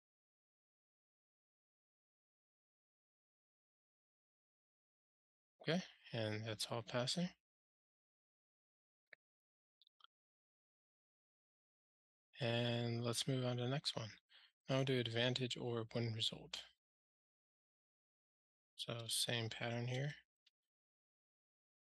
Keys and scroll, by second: 1.9 ctrl+alt+shift+r, 21.2 super+BackSpace.